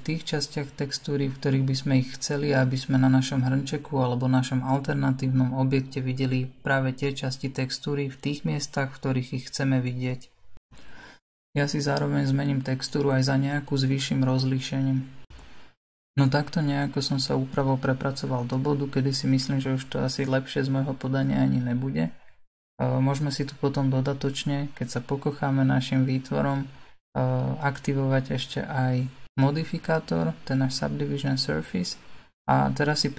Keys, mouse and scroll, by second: 0.1 s, 1.0 g, 2.4 s, 4.0 n, 6.3 click, 6.8 l, 7.2 g, 8.3 s, 8.8 g, 11.1 l, 11.9 l, 12.2 g, 14.7 s, 15.6-19.8 middle drag, 19.8 n, 20.2-24.0 middle drag, 24.0-25.0 drag, 25.0-29.3 middle drag, 29.7-33.1 middle drag.